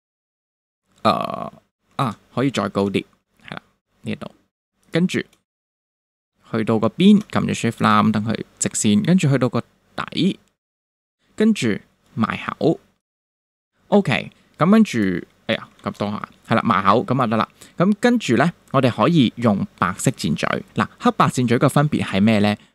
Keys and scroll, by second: 2.0 super+z, 2.8 shift+super+z, 15.8 super+z.